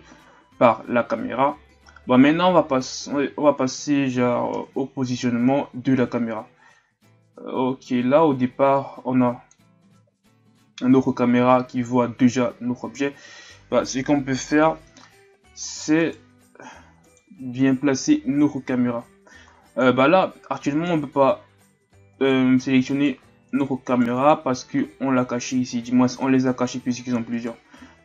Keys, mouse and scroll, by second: 4.5 KP_0, 7.1-10.6 drag, 26.1 click, 27.3 right click.